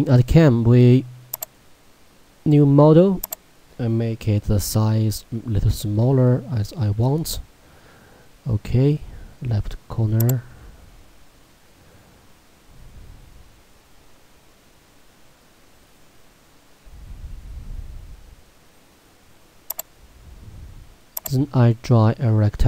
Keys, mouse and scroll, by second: 1.5 click, 10.3 click, 19.7 click.